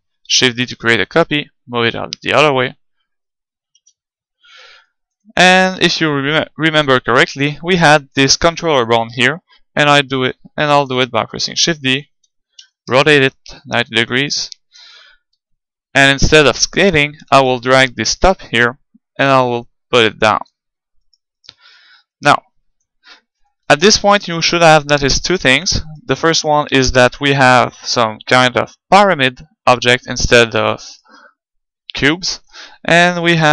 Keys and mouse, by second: 0.2 shift+d, 0.5-2.3 right drag, 1.1-2.8 drag, 2.9-7.7 middle drag, 3.8 KP_1, 7.4-9.3 right drag, 10.7 shift+d, 12.1-13.8 drag, 12.7 r, 13.9-15.6 drag, 14.4 middle click, 15.3 g, 15.6 middle click, 17.0-20.5 drag, 17.4-19.2 right drag, 21.1-23.1 right drag, 22.1-23.9 drag, 23.5-26.3 middle drag, 25.9-28.2 right drag, 30.3-32.5 right drag, 31.8-33.5 middle drag, 32.6 right click, 33.4-33.5 right drag.